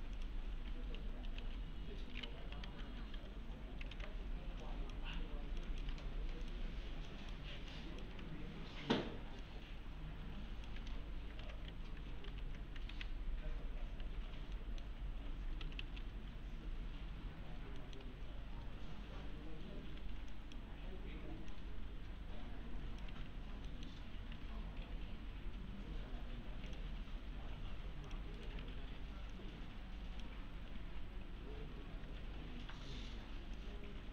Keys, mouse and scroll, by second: 0.2 click, 0.5-2.4 typing, 1.9-2.4 scroll down 1, 2.9-3.2 scroll down 1, 3.9 alt+w, 4.6 click, 5.2-6.0 ctrl+click, 7.7 ctrl+click, 8.3-9.4 scroll up 1, 9.4-10.3 click, 11.3 alt+q, 12.3 alt+q, 12.9 alt+w, 14.0 1, 14.6 middle click, 15.4 scroll down 1, 15.4-16.3 typing, 16.1-16.4 scroll down 1, 17.8 middle click, 18.2-20.0 scroll up 1, 20.0 1, 20.3 click, 23.1 1, 23.7 middle click, 24.1 scroll up 1, 24.4 alt+1, 26.7 click, 28.4 right click, 28.6 1, 29.3-30.3 click, 31.9 e, 33.6-34.1 click.